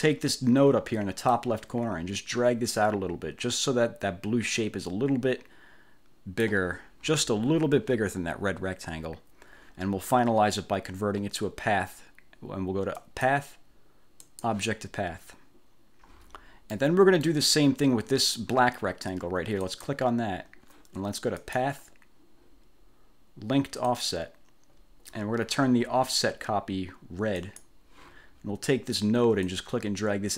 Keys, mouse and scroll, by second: 1.4-6.8 drag, 13.1 click, 14.3 click, 16.9 middle click, 17.1 click, 19.7 click, 21.5 click, 24.0 click, 27.5 click, 29.6-30.3 drag.